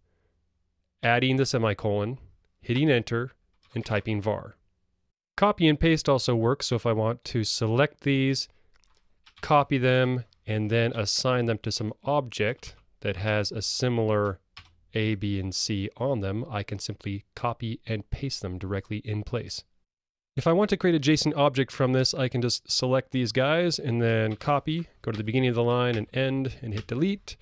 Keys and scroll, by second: 9.4 super+c, 14.6 super+v, 19.8 Escape, 24.3 super+c.